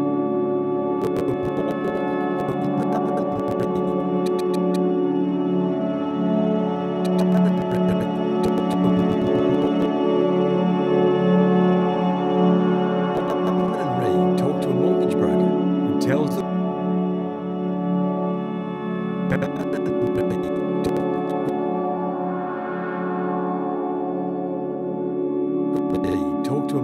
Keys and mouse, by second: 1.0-4.6 drag, 5.2-5.6 drag, 6.4 Delete, 7.0-9.7 drag, 10.7 alt+g, 13.1 click, 13.5 space, 17.1 click, 18.1 click, 19.3-21.4 drag, 22.0-23.2 drag, 23.4 Delete, 23.7-24.0 drag, 24.6 g, 25.4 click, 25.7 click, 26.0 space.